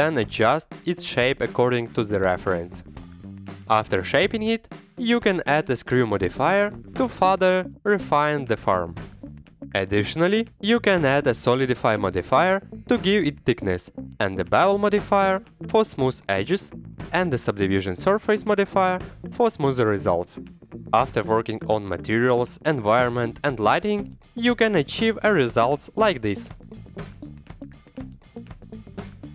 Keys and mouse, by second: 0.0 Tab, 0.1 click, 1.0 shift+a, 1.1 Tab, 1.7 a, 1.7 r, 2.2 ctrl+click, 2.3 g, 2.8 click, 3.3-4.8 typing, 4.0 click, 4.4 click, 4.6 click, 4.9 click, 5.0 Tab, 5.8-7.6 drag, 8.0 click, 8.3 middle drag, 8.6 KP_1, 8.9 click, 9.0 Tab, 9.3 KP_1, 9.4 e, 9.7 r, 10.1 ctrl+z, 10.2 ctrl+z, 10.3 Tab, 10.4 click, 10.5 middle click, 10.6 middle click, 11.0 click, 11.7 drag, 12.0 middle click, 12.7 middle drag, 13.2-15.1 drag, 15.3 middle click, 15.6 shift+middle click, 16.0-17.2 shift+drag, 17.4 shift+click, 17.8 drag, 18.0-18.7 drag, 20.4 click, 21.5-21.9 middle drag, 21.9 click, 22.3 middle click, 22.8 middle drag, 23.2 KP_1, 24.9 click, 25.1 h, 25.2 right click, 25.3-26.4 middle drag.